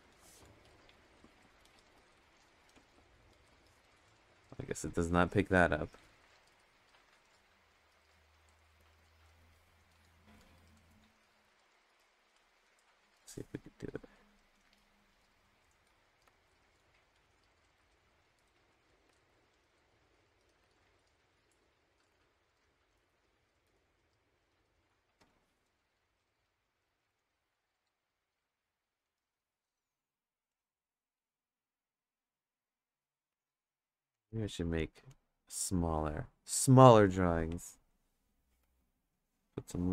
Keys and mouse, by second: 0.8 click, 1.9 click, 3.3 ctrl+z, 4.9 click, 6.0 click, 7.0 click, 8.8 ctrl+z, 11.1 ctrl+z, 11.4 ctrl+z, 11.9 ctrl+z, 13.2 click, 14.3-16.1 drag, 16.2 ctrl+z, 16.9 click, 17.7-18.9 drag, 19.1 ctrl+z, 19.6 click, 20.6 ctrl+z, 21.1 click, 22.1 ctrl+z, 22.6-25.2 drag, 27.2 click, 28.0 click, 30.5 click, 32.2 click, 33.3 ctrl+z, 35.1 click, 37.9 click, 38.6 ctrl+z, 39.1 click.